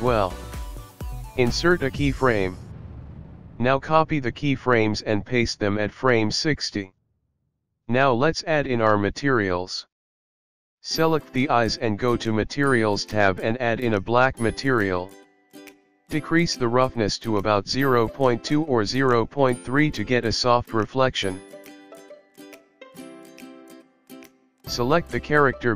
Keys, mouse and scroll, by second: 0.0 Left, 0.0 r, 2.8 i, 3.7 click, 4.0 click, 4.7 ctrl+c, 5.3 click, 7.2 ctrl+v, 7.8 click, 9.8 click, 12.6 click, 13.2 click, 14.6 click, 19.6 click, 25.2 click.